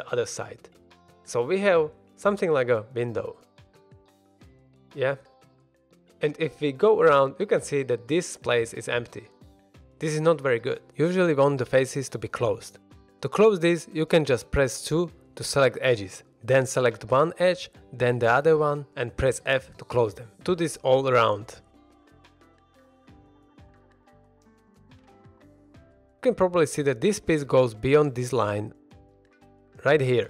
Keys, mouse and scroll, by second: 0.3 click, 0.6 x, 1.1 x, 2.1 x, 2.4 middle drag, 2.7 click, 3.0 x, 3.8-4.7 middle drag, 4.9 shift+middle drag, 5.2-5.8 scroll down 1, 7.8 middle drag, 8.6 scroll up 1, 8.9 middle click, 10.5-11.2 middle drag, 13.1 alt+a, 15.0 2, 16.5 click, 17.5 shift+click, 18.0-18.4 middle drag, 19.0 f, 20.3 click, 20.7 shift+click, 21.0 f, 21.1 middle click, 21.6-22.0 scroll up 1, 22.0 click, 22.4 shift+click, 23.1 f, 23.3 shift+middle drag, 23.6 middle click, 24.3 click, 24.7 shift+click, 25.1 f, 25.5 alt+a, 25.7 middle drag, 26.0 scroll down 1, 27.0 middle click, 28.7 middle click.